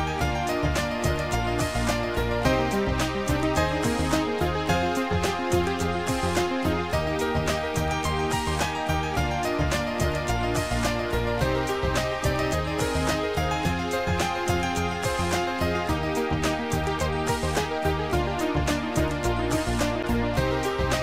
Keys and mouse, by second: 2.8 click, 6.3 click, 7.0 shift+click, 7.9 shift+click, 9.1 shift+click, 9.7 shift+click, 10.7 shift+click, 11.9 shift+click, 15.0 shift+click, 17.8 shift+click.